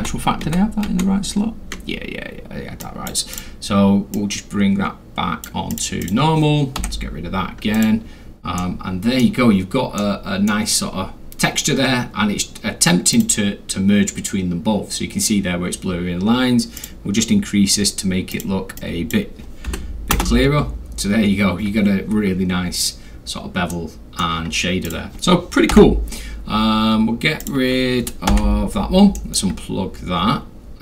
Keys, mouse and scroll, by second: 2.8 drag, 4.1-5.4 drag, 5.7 click, 6.9 Delete, 7.7 click, 8.6 middle click, 10.1-10.5 middle drag, 11.1 scroll up 2, 11.3 scroll, 13.1 click, 16.8 click, 18.3 click, 18.9 click, 19.7 1, 20.1 Return, 22.6 middle click, 22.7-23.2 scroll down 3, 23.7-24.2 middle drag, 24.9 click, 24.9 scroll, 25.7 Delete, 27.4 click, 28.3 Delete, 29.1 middle click, 29.5-30.7 scroll down 6.